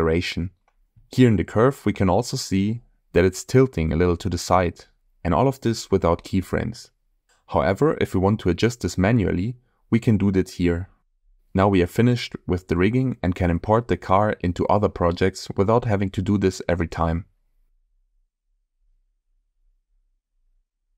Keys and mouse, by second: 1.1-1.9 shift+middle drag, 2.9 middle click, 7.7 click, 11.2 space, 12.2 click, 14.0-15.0 drag.